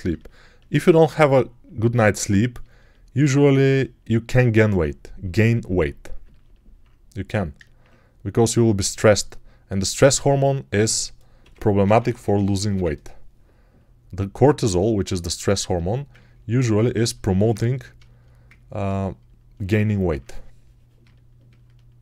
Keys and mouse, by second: 3.5 g, 11.3-12.6 typing, 18.7-20.9 alt+shift+right drag, 21.4 alt+shift+right click.